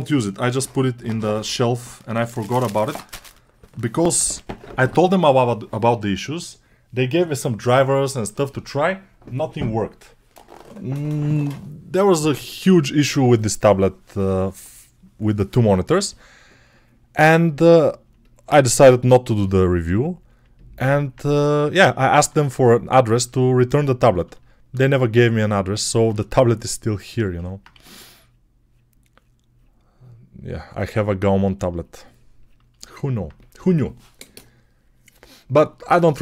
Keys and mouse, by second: 18.5 g, 20.5-36.2 drag, 22.0 1, 27.6 1.